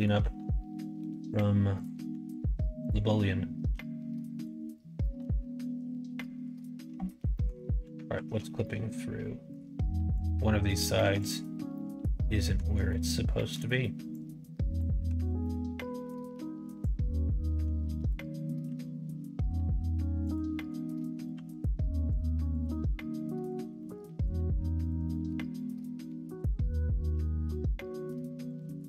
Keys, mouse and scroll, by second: 0.1 s, 2.0 s, 3.7 g, 4.9-6.2 middle drag, 7.3 middle click, 8.2 alt+z, 8.6 scroll up 1, 8.6 middle click, 10.1 click, 11.0 1, 11.1 click, 11.7 middle click, 12.8 middle click, 14.1 click, 15.1 alt+z, 15.3 middle click, 16.8-18.0 drag, 18.6 g, 20.5 middle click, 21.2 click, 21.3 g, 22.4 click, 22.7 g, 23.7 middle click, 23.7 scroll up 1, 24.7 click, 25.0 middle click, 26.6 click, 27.1 g, 28.4 click.